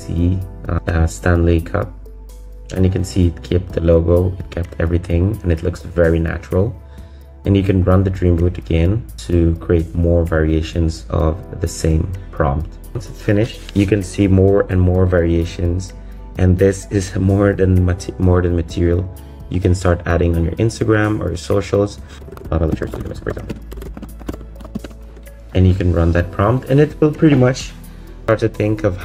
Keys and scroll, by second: 22.2 BackSpace, 23.4 s, 23.5 space, 23.7 BackSpace, 24.0 space, 25.1 BackSpace.